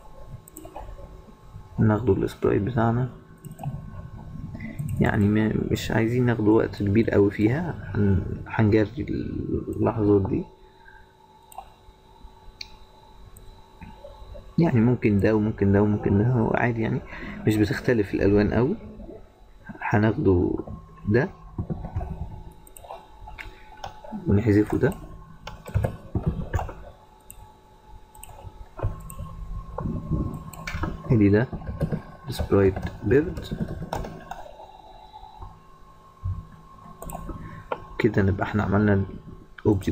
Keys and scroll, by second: 22.1 ctrl+c, 26.7 ctrl+v.